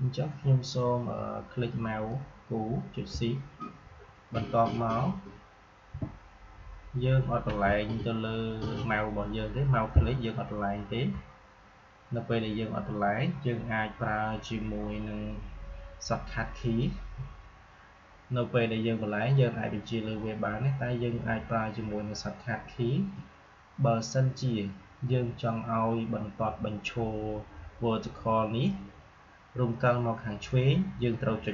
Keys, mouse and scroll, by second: 2.0-12.0 drag.